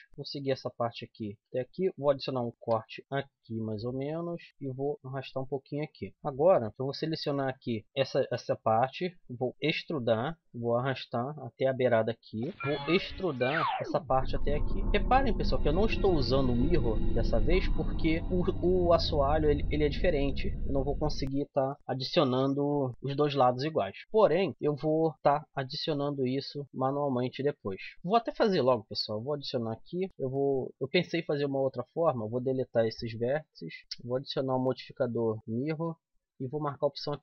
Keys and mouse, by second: 0.1-1.1 drag, 0.4 g, 2.6 ctrl+r, 4.5 right click, 5.4 click, 6.1 right click, 6.7 a, 6.8 c, 9.5 e, 10.5-12.4 drag, 13.6 e, 13.7-14.8 drag, 14.9 click, 15.9 middle click, 16.5 z, 16.7 middle click, 18.3 z, 25.1 ctrl+r, 27.3 right click, 27.9 a, 28.2 c, 29.6-31.0 drag, 30.1 x, 33.8-36.1 drag, 36.6 click.